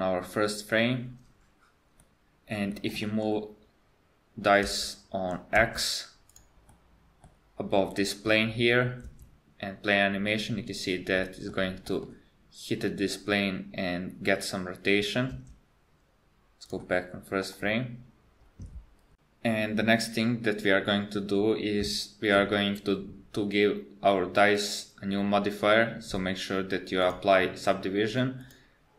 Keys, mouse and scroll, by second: 2.0 middle click, 2.7 middle click, 3.0 KP_1, 4.7 g, 6.7 middle click, 9.1 space, 11.3 middle click, 11.9 middle click, 15.4 space, 16.7 click, 17.4 KP_1, 24.5 click, 27.0 click.